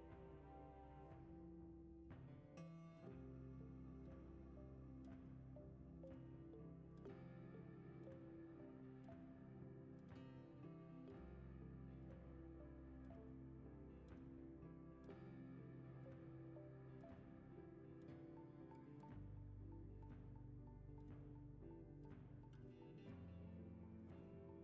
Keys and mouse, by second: 0.7-4.2 typing, 5.3 g, 6.3 shift+middle drag, 6.8 click, 7.5 shift+d, 8.8 g, 11.1 shift+middle click, 11.7 click, 12.0 shift+d, 13.4 g, 14.1 g, 14.8 s, 15.5 g, 17.6 middle drag, 17.6 g, 18.2 g, 18.7 KP_0, 20.7 click, 21.3-21.9 shift+drag, 22.1 g, 22.8 drag, 23.7 shift+click, 24.0 g.